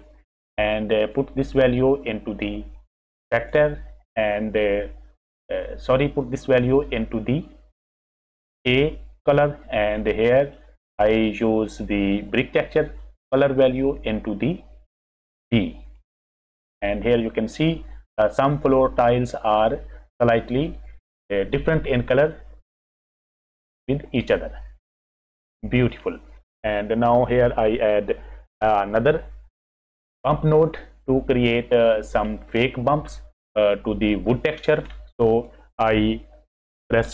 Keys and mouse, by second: 1.1 click, 1.5-3.6 drag, 6.2 click, 6.5-8.8 drag, 10.3 click, 10.3 right click, 11.5 click, 11.5 right click, 13.7 click, 13.7 right click, 14.0-15.9 drag, 25.1 click, 25.1 right click, 27.1 click, 27.1 right click, 30.1 click, 30.1 right click, 35.3 click.